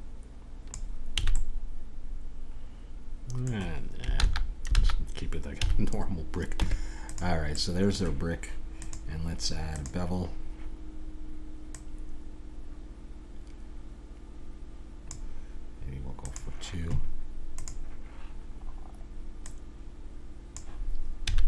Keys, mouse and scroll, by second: 1.2 a, 1.3-3.2 middle drag, 4.1 ctrl+z, 4.7 ctrl+z, 5.6 a, 6.6 Tab, 8.7 click, 9.8 click, 11.7-13.6 drag, 16.2-21.2 drag, 21.3 a.